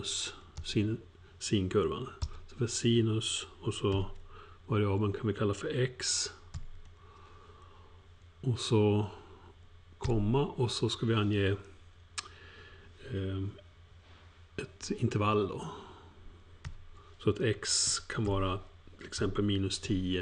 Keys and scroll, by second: 0.4-1.1 typing, 2.2 typing, 3.9 alt+8, 4.5-6.5 typing, 16.6 alt+shift+(, 17.8-20.2 typing.